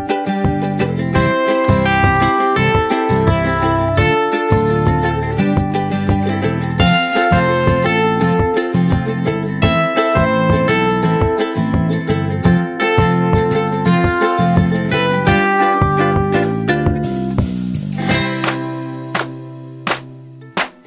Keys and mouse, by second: 0.2-1.1 drag, 4.7 click, 8.6 click, 10.6-11.8 drag, 17.7-19.4 drag.